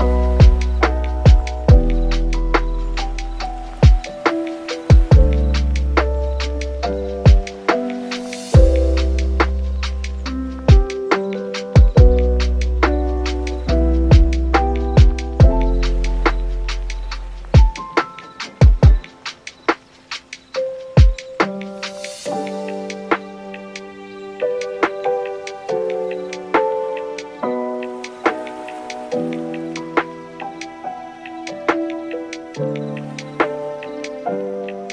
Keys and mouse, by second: 1.1 x, 1.7 middle click, 1.9 Tab, 2.1 middle click, 2.4 click, 3.1 shift+middle click, 3.2 Tab, 3.7 click, 4.0 x, 4.7 click, 5.1 click, 5.6 x, 6.1 click, 6.8 x, 7.1 middle click, 7.4 middle click, 7.5 Tab, 7.9 click, 8.2 super+s, 8.6 shift+middle click, 8.8 shift+middle click, 9.2 right click, 9.6-10.7 drag, 10.8 click, 10.9 middle click, 12.4 click, 12.6 click, 13.0 click, 13.2 click, 13.6 middle click, 13.9 middle click, 15.2 middle click, 15.6 middle click, 15.8 click, 16.0 middle click, 16.3 click, 16.6 shift+d, 17.0 s, 18.3 click, 18.7 s, 19.3 middle click, 19.8-20.8 drag, 21.1 shift+middle click, 21.7 Tab, 22.1 super+r, 24.4 Tab, 24.8 middle click, 25.5 middle click, 26.0 middle click, 26.2 shift+middle click, 27.7 e, 28.6 Tab, 28.9 s, 29.7 right click, 29.8 middle click, 30.1 middle click, 30.4 super+s, 31.2 right click, 31.4 shift+middle click, 31.6 shift+d, 33.4 middle click, 33.7 super+s, 33.8 shift+middle click, 34.1 click, 34.4 click, 34.8 click.